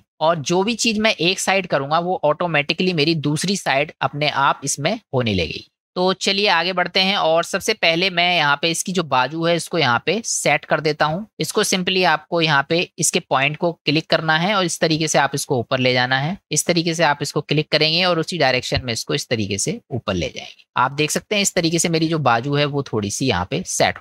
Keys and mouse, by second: 0.0 click, 4.3-6.6 middle drag, 8.7-11.8 drag, 12.9 click, 14.5-16.1 drag, 17.9-20.2 drag, 20.4 click, 21.5-23.0 middle drag.